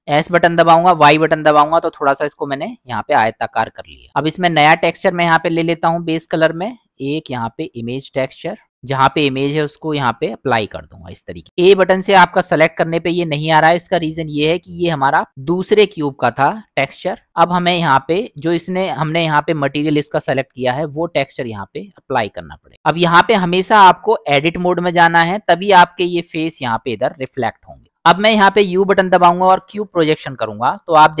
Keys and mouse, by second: 0.0 s, 2.6-3.2 middle drag, 5.7-7.7 drag, 10.3-11.4 middle drag, 11.6 a, 12.9-13.5 middle drag, 17.0 click, 17.3 click, 20.5-21.6 drag, 22.7 click, 23.2-23.8 middle drag, 24.3 click, 25.4 click, 27.8 ctrl+z, 28.4 u, 31.0 middle drag.